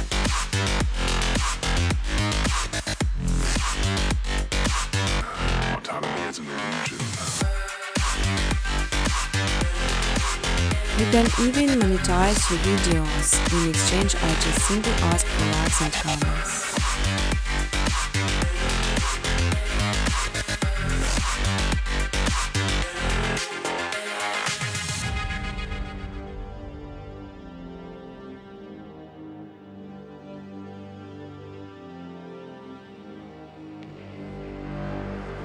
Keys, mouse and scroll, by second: 0.0-0.8 typing, 1.8-3.8 typing, 4.3 scroll, 4.3-5.0 scroll down 3, 5.0 scroll down 2, 8.1-9.5 scroll, 9.5 click, 9.9 scroll down 5, 10.7 click, 11.2 click, 13.2-13.7 scroll, 17.2-17.8 scroll, 18.4 click, 19.0 click, 19.9 click, 21.6 click, 22.3 click, 22.8-23.1 typing, 23.4 Return, 24.5 space, 25.9-26.3 typing, 27.6 click, 28.4 click, 29.3 click, 32.8-35.4 typing, 34.3 Tab.